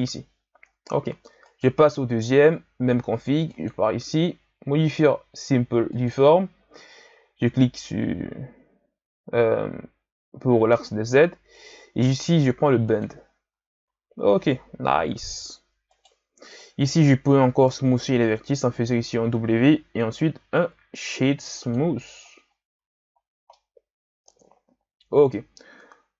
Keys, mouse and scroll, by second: 1.4 right click, 6.1 click, 10.7 click, 12.9 click, 13.8 a, 15.1 KP_1, 15.9 right click, 16.8-18.2 middle drag, 18.2 w, 22.7 a, 23.5-26.1 middle drag.